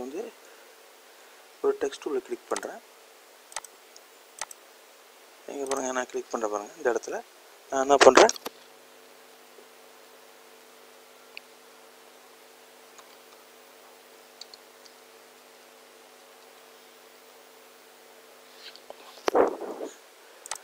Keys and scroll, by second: 1.8 m.